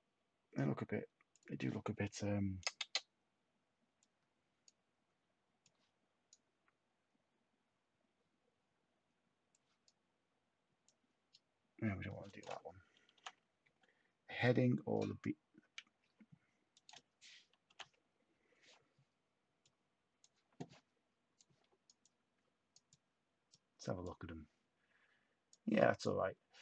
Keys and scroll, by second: 13.1 0, 13.2 Tab, 17.7 0, 17.7 Tab.